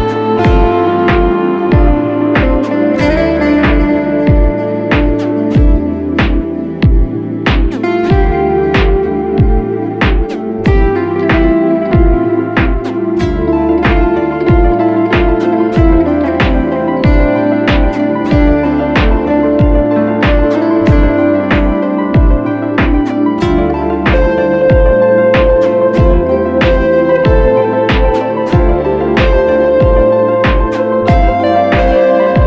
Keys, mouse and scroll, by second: 5.4 alt+right click, 6.9 double click, 10.3 double click, 10.4 right click.